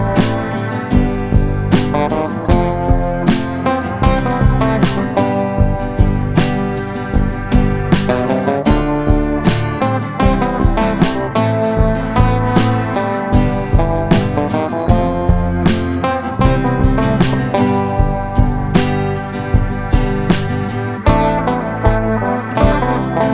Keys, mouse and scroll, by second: 1.5-4.6 right drag, 4.6 click, 6.1 click, 6.8-7.6 middle drag, 8.1 click, 10.6-12.5 drag, 13.4-14.6 drag, 14.7-15.4 middle drag, 16.2 click, 17.7 drag, 17.9-18.5 middle drag, 19.4 click, 19.8-21.9 middle drag, 22.4-23.3 middle drag.